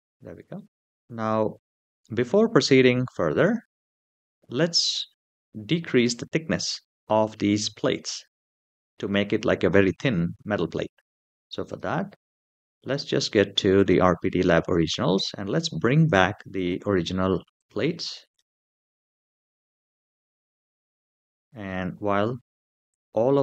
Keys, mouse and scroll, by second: 0.3-0.7 shift+middle drag, 11.4 click, 13.5 click, 15.8 click, 16.3 click, 17.4 click, 17.8 click, 18.1 click, 18.7 click, 19.4 click, 20.0 click, 22.7 click.